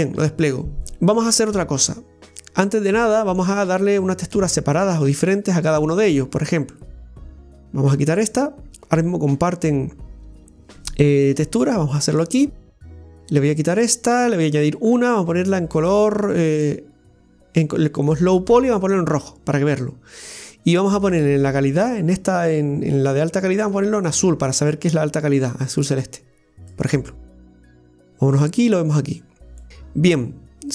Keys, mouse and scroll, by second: 2.3-3.0 scroll down 1, 11.3 Tab, 12.0 right click, 13.7-18.5 drag, 21.0 click, 23.6 click, 24.0 click, 28.9 click.